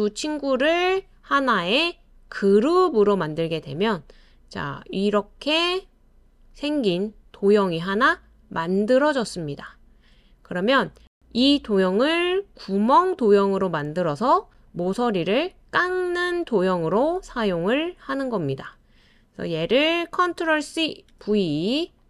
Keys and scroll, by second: 20.6 super+c, 21.1 super+v.